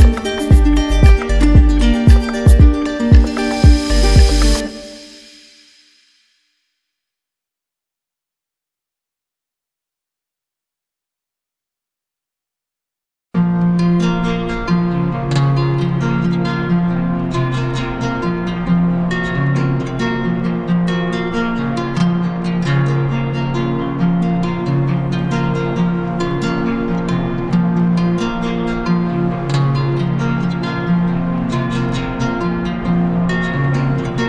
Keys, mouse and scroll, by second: 0.5 click, 1.6 click, 2.5 alt+click, 2.7 alt+click, 3.5 ctrl+z, 15.3 click, 18.2 click, 18.5 ctrl+z, 20.7 click, 22.7 click, 23.7 click, 24.8-25.9 drag, 26.2-27.3 drag, 27.6-28.6 drag, 29.8 click, 32.9 shift+click.